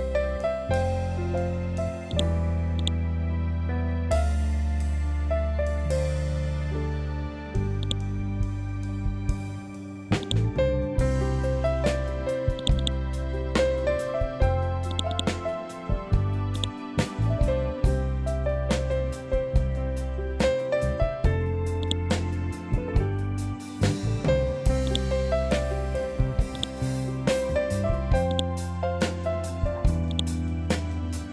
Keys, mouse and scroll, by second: 2.7 scroll down 1, 7.3 click, 9.7 click, 12.0 click, 21.3 click, 24.3 click, 27.8 right click, 29.6 click.